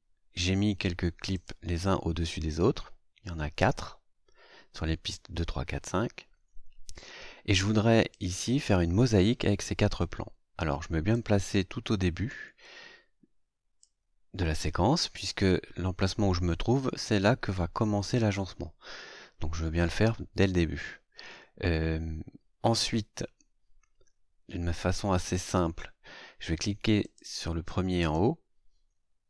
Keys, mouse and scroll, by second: 1.3 click, 3.1 scroll down 2, 5.5-5.8 scroll up 2, 6.4 scroll up 2, 8.1-8.8 drag, 11.1-14.0 drag, 27.0 click, 28.0 right click.